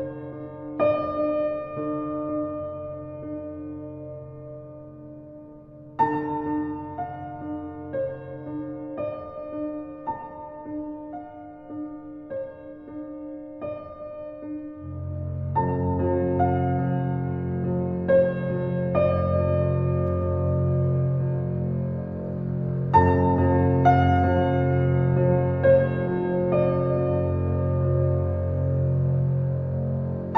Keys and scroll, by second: 4.3 2, 4.8 5, 5.2 Return, 9.4 KP_Subtract, 10.0 4, 10.2 5, 10.5 Return.